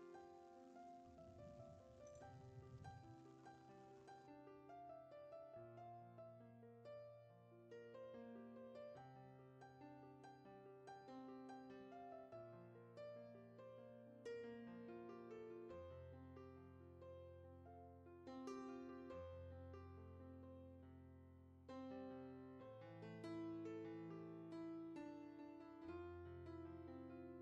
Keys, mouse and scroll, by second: 1.0 click, 3.2 click, 4.7-6.8 drag, 6.8-8.5 scroll down 12, 8.5-11.9 drag, 12.1 click, 17.3-17.7 scroll up 3, 17.7 scroll down 2, 18.3-19.8 middle drag, 19.8-20.9 drag, 21.2 scroll down 1, 21.3 middle click, 21.4 scroll up 1, 21.7 click, 22.3 scroll down 3, 22.6 scroll up 2, 22.9 shift+middle click, 23.1-23.5 scroll up 1, 23.5 click, 24.2 middle click, 24.4 scroll up 1, 24.5-25.5 drag, 25.5 scroll down 2, 25.7-26.2 scroll up 3, 25.8 middle click, 26.2 click, 26.7 scroll down 3, 26.9 shift+middle click.